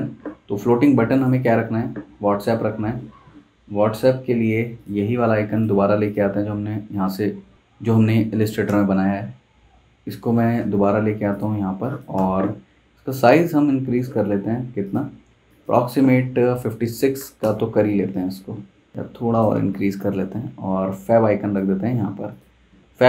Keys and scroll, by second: 6.7 super+c, 8.3 super+c, 8.6 super+Tab, 10.6 super+v, 11.5 z, 12.1 v, 16.9 typing, 17.4 Return, 22.7 z, 22.9 z.